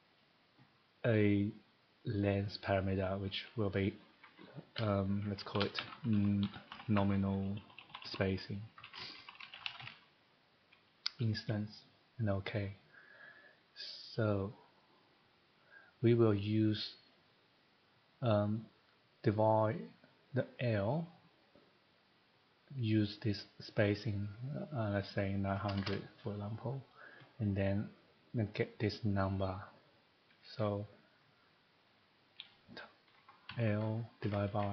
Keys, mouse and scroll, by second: 1.5 click, 4.7-9.8 typing, 5.9 click, 11.0-11.7 typing, 11.2 click, 24.5 click, 25.4 typing, 26.9 click, 31.2 click, 33.4 l, 34.2 /.